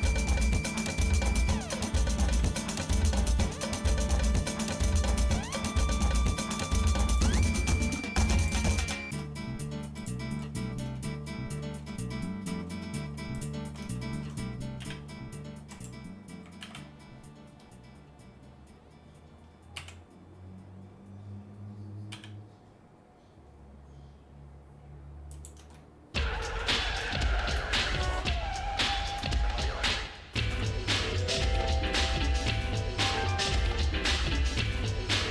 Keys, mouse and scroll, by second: 0.6-1.4 scroll up 5, 2.3 ctrl+r, 7.8 ctrl+Tab, 9.4 scroll up 1, 9.5 scroll down 1, 10.0 alt+shift+click, 10.6 scroll down 2, 11.0 shift+middle click, 12.7 scroll up 1, 12.7 scroll down 1, 13.4 alt+shift+click, 14.0 shift+middle click, 14.8 e, 16.6 alt+s, 25.8 shift+middle click, 26.6 Tab, 27.1 shift+middle click, 27.7 scroll down 2, 27.8 scroll up 1, 27.9-28.3 scroll down 2, 28.4 shift+middle click, 29.3-29.6 scroll down 2, 29.9 middle click, 30.5 Tab, 31.3 shift+middle click, 32.0 middle click, 32.6 shift+middle click, 33.7 middle click, 34.3 shift+middle click, 35.2 shift+middle click.